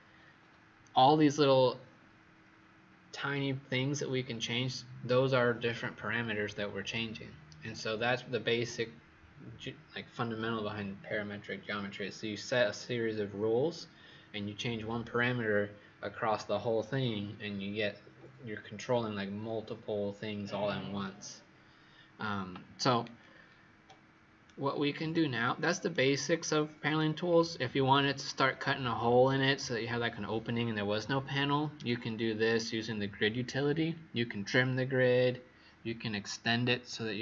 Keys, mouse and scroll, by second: 23.1-23.8 scroll down 7, 23.8 right click, 26.3-26.9 scroll down 5, 27.0 scroll up 1, 31.7 click.